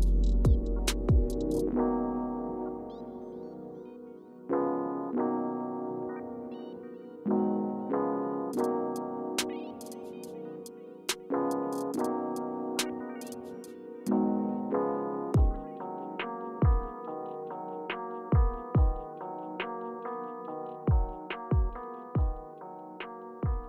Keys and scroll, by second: 0.9-1.6 typing, 4.8 Return, 10.6 Return, 11.4 Return, 13.6 Up, 13.8 Up, 14.1 Up, 18.1 0, 18.3 Return, 20.3 typing, 21.7 space.